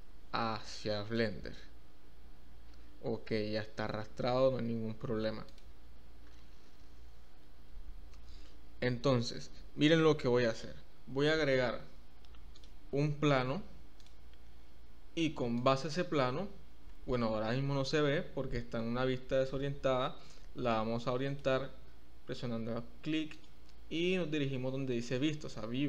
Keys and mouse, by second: 5.4 click, 12.6-15.8 drag, 21.3 click, 23.3-25.8 drag.